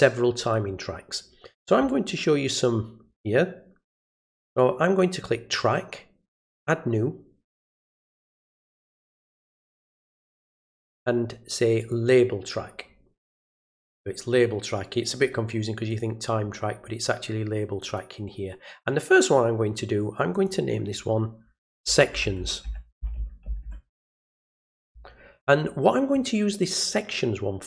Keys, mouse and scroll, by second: 4.2 click, 11.8 click, 15.9 click, 17.8 click, 20.3 click.